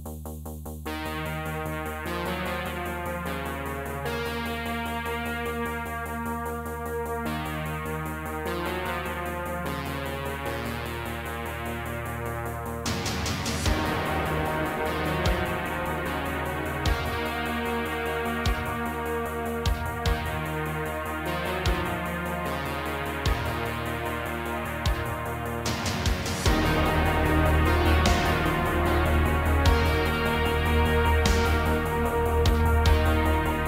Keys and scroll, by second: 0.4 3, 1.9 g, 3.2 Tab, 4.3 ctrl+a, 4.8 Tab, 5.3 a, 5.7 m, 7.0 1, 7.6 g, 11.2 m, 12.2 Tab, 12.6 Tab, 13.4 g, 14.1 g, 17.5 a, 18.0 m, 33.4 Tab.